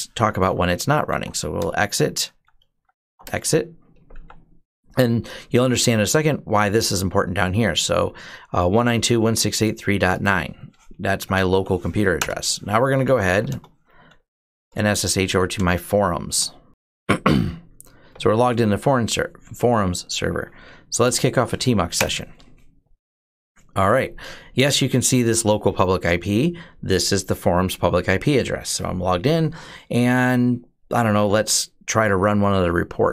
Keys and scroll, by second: 0.2 ctrl+c, 0.3-4.5 typing, 10.7-16.5 typing, 12.0 Return, 20.5-21.5 typing, 21.7 Return.